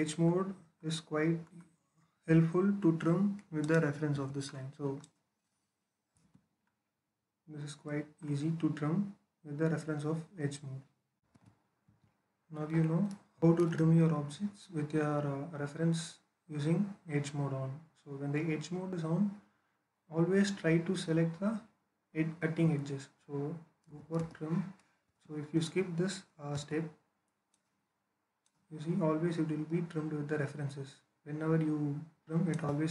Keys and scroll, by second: 4.0 Escape, 5.7-6.5 typing, 23.7-24.9 typing, 26.4 space.